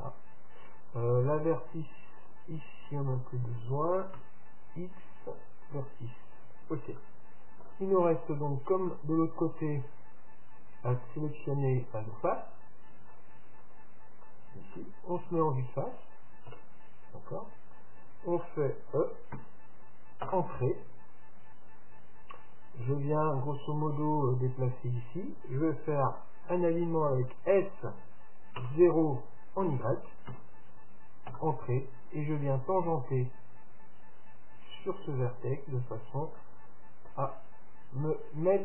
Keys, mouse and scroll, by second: 2.3-4.2 drag, 3.2-5.2 right drag, 4.2 x, 7.1-10.8 middle drag, 8.7 scroll up 1, 11.0-12.9 drag, 11.8-16.3 right drag, 15.2 KP_3, 16.6 KP_Decimal, 17.5-19.6 middle drag, 19.4 e, 22.9-24.7 drag, 27.2 s, 32.4-34.4 drag, 36.5-38.6 middle drag, 38.2 scroll up 1, 38.4 scroll down 1.